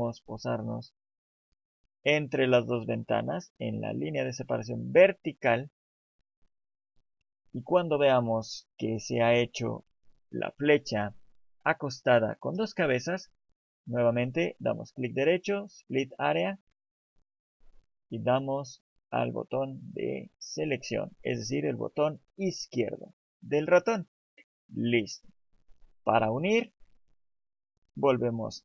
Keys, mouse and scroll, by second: 16.1 right click.